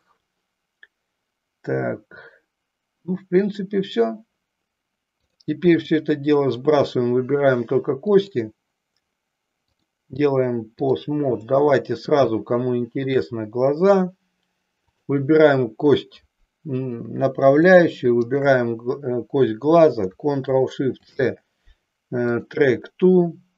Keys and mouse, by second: 5.1 click, 8.0 click, 9.8-11.0 drag, 11.5-13.1 middle drag, 14.7-16.1 drag, 22.5 ctrl+shift+c.